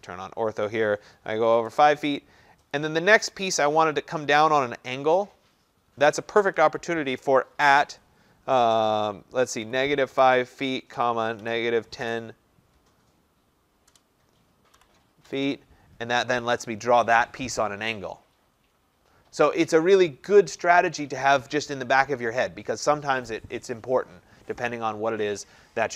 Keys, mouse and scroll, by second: 1.2-1.7 typing, 2.8 click, 4.7-5.4 typing, 7.5 typing, 9.4-12.1 typing, 13.9-15.5 typing.